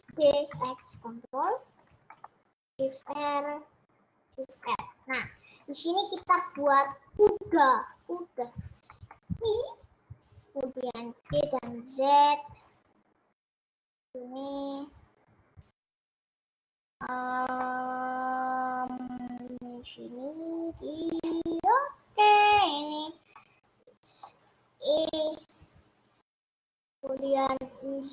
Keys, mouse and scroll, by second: 0.0 shift+d, 2.2 middle click, 3.0 shift+r, 4.6 shift+r, 5.8 click, 6.2 middle click, 7.0 scroll up 1, 9.3 middle click, 9.4 i, 11.4 g, 16.6-21.0 middle drag, 23.4-25.0 middle drag, 25.0 e.